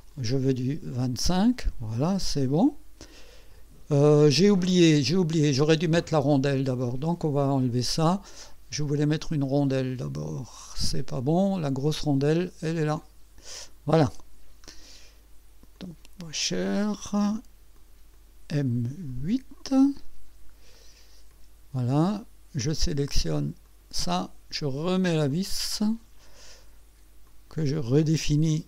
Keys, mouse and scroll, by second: 0.1 click, 0.9 click, 1.9-4.3 drag, 6.3 click, 6.9 click, 7.4 click, 9.9 click, 10.4 click, 13.0 click, 14.6 scroll down 1, 15.7 click, 17.7 click, 19.1 click, 21.3 click, 22.1 click, 23.6 click, 23.8 click, 25.3 click, 27.3 click, 28.2 click.